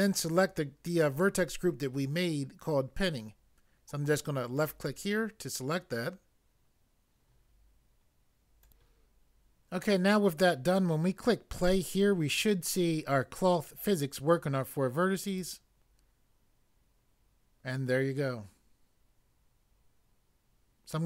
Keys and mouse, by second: 4.5 click, 8.6 click, 15.3 click.